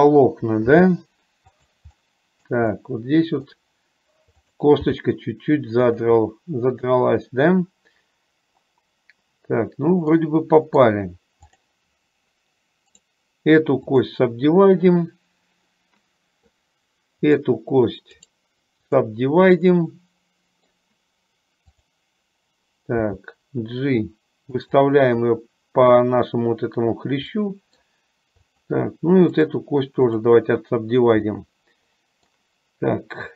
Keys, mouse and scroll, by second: 0.8 g, 2.3 middle click, 2.9 middle click, 4.5 click, 5.0 g, 6.4-11.1 middle drag, 11.6 click, 17.4 click, 19.8-20.8 middle drag, 21.8 click, 23.1 g, 27.5 middle click, 28.6 click, 31.4-32.4 middle drag.